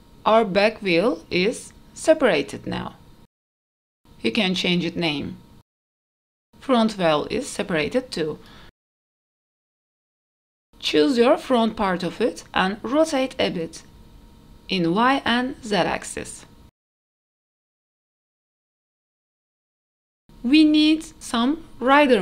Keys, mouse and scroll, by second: 0.4 Tab, 0.9 click, 1.6 click, 1.8 click, 1.8 shift+middle click, 1.8 scroll up 2, 3.5 click, 5.4 click, 5.6 click, 7.1-7.7 scroll down 1, 7.7 click, 9.3 click, 10.7 click, 12.3 middle click, 12.3 KP_3, 12.9 KP_1, 14.3 r, 16.8 r, 18.1 middle click, 18.2 click, 18.4 scroll up 1, 18.6 shift+middle click, 18.8 middle click, 19.6 scroll down 1, 19.9 KP_0, 19.9 q, 20.0 middle click, 20.3 q, 20.5-20.9 scroll up 2, 20.9 shift+middle click, 21.3 middle click.